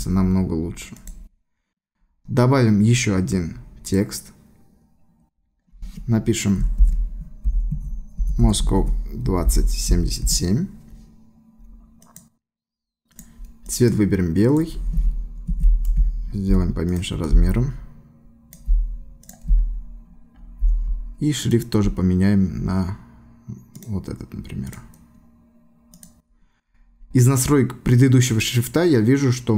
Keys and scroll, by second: 6.8-10.4 typing, 15.5 ctrl+t.